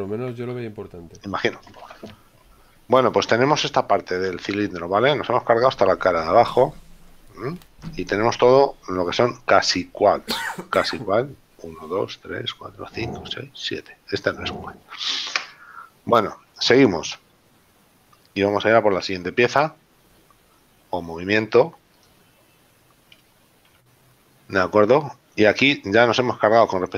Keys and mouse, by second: 2.0 z, 3.0 middle click, 7.4 middle click, 15.4 KP_7, 20.1 click, 22.1 click, 23.8 KP_Decimal.